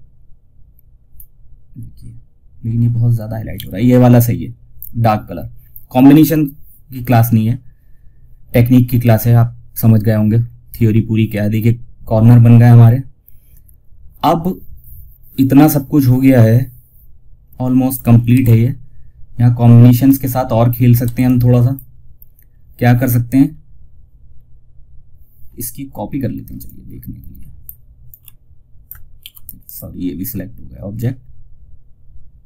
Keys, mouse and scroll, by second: 2.8 ctrl+z, 4.5 scroll down 1, 9.7 scroll down 1, 17.2 click, 17.6 shift+F2, 19.4 click, 20.3 F2, 20.5-22.8 drag, 22.8 scroll down 1, 24.7 scroll down 1, 25.2 typing, 25.9-28.5 drag, 28.5 ctrl+z, 28.9-32.4 drag.